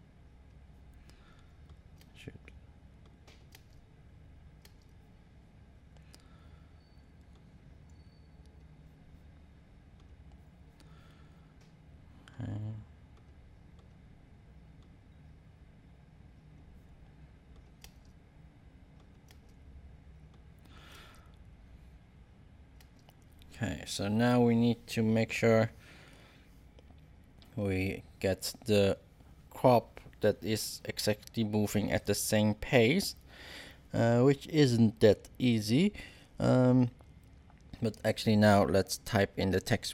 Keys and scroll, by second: 1.9 space, 3.5 space, 17.8 space, 19.3 space.